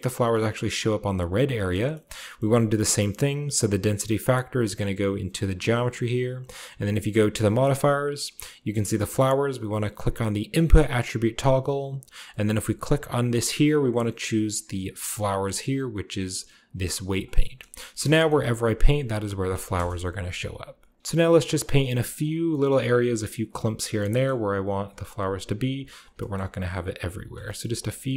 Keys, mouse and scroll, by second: 0.3 click, 0.8-1.4 drag, 1.2-2.0 scroll down 1, 1.4 middle click, 2.0-3.3 scroll up 3, 2.4 middle click, 3.0-4.1 middle drag, 3.3 scroll down 1, 3.3-4.1 scroll up 1, 4.3-5.2 middle drag, 5.2 click, 5.6-7.2 drag, 7.3-8.9 drag, 8.0-10.0 scroll down 1, 11.5-13.8 drag, 16.4 click, 17.2 middle click, 17.5-18.1 scroll down 1, 18.1 shift+scroll up 1, 18.2-19.4 shift+middle drag, 18.5-20.7 drag, 19.6 KP_0, 20.2 f, 20.7 shift+middle click, 20.9 shift+click, 21.0 shift+middle click, 21.0 f, 21.2 click, 21.2 middle click, 21.3 click, 21.6 click, 21.6 f, 21.9 click, 22.0 click, 22.2 click, 22.3 click, 22.7 click, 22.9 click, 23.1 click, 23.5 click, 23.7 middle click, 24.4 middle click, 24.5 middle click, 24.5 typing, 26.0-27.6 shift+drag, 26.4 middle click, 26.5 middle click, 26.7 middle click, 27.0 middle click, 27.7 shift+click, 27.9 shift+click, 28.1 shift+click.